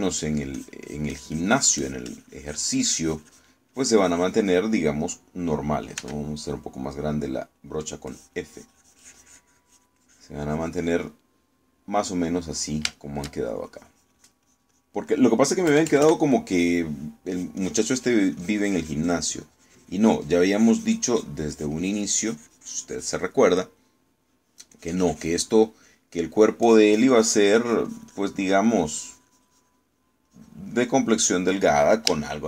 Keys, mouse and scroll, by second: 0.9 middle click, 1.6-4.7 drag, 4.8-5.8 drag, 7.0 f, 8.6 click, 9.2-13.0 drag, 13.3 middle click, 14.0 shift+middle click, 14.8-16.1 shift+drag, 16.8 KP_Add, 17.4 middle click, 18.4-22.5 drag, 22.6-24.6 drag, 24.9 middle click, 25.8 click, 27.2 middle click, 27.7-29.5 drag, 30.2-31.3 drag, 31.4 click, 31.8 middle click.